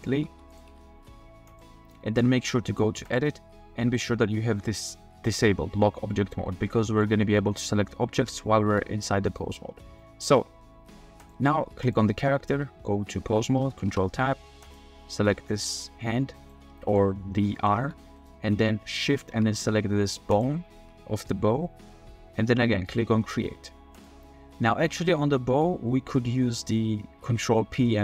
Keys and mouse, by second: 0.0-0.7 typing, 0.5 click, 1.5-2.8 drag, 3.1-6.2 drag, 6.7-7.0 middle drag, 8.7 r, 9.2-9.5 drag, 10.0 middle drag, 11.2 click, 11.8 click, 13.9 ctrl+Tab, 14.6 click, 15.3 r, 16.8 click, 17.5 shift+middle click, 17.8 r, 19.1 shift+middle drag, 20.3 shift+middle click, 23.9 click.